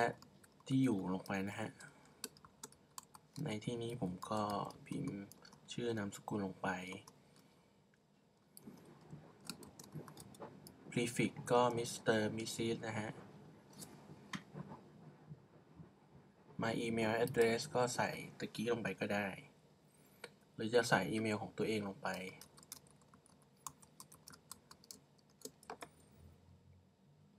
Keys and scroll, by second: 0.0-0.9 typing, 2.4-4.9 typing, 9.6-14.4 typing, 22.2-27.3 typing.